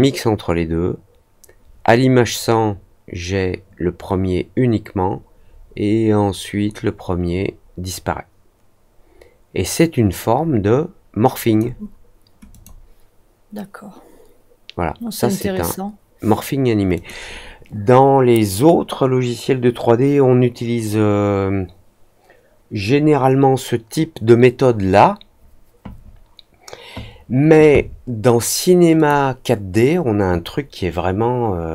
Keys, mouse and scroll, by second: 12.4 click, 16.9 click, 28.9 click.